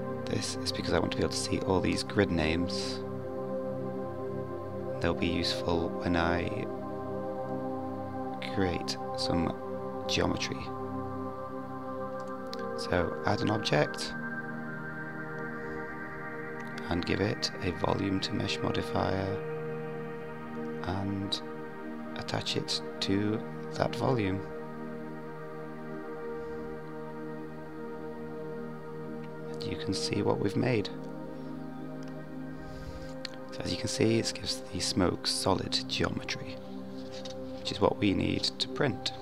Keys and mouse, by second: 3.7 click, 8.7-11.4 drag, 14.8 click, 15.5-17.3 drag, 18.6 click, 22.2-25.5 drag, 26.4-39.2 drag.